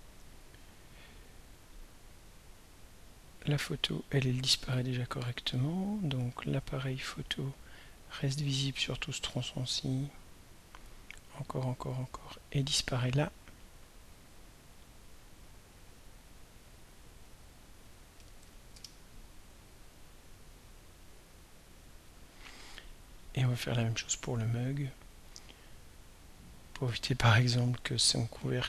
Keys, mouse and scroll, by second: 3.1 click, 5.5 click, 7.2-15.3 drag, 16.9 click, 17.4 click, 18.4 0, 18.7 Return, 20.7-22.2 drag, 24.6 click, 26.0-28.6 drag.